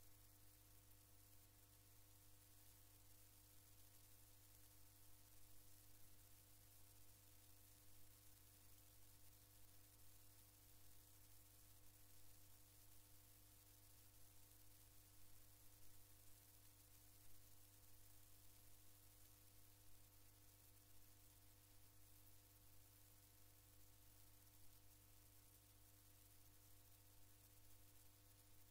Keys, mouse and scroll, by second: 3.0-4.3 drag, 6.8-8.1 drag, 11.7 click, 13.4 ctrl+click, 14.3 ctrl+click, 15.1 ctrl+click, 16.1 ctrl+click, 19.3 click, 24.5 click, 26.2-28.5 drag.